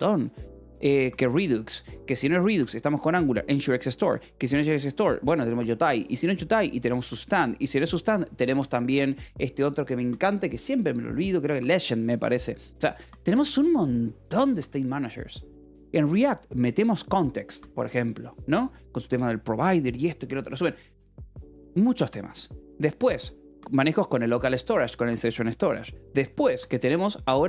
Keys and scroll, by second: 21.0 Escape.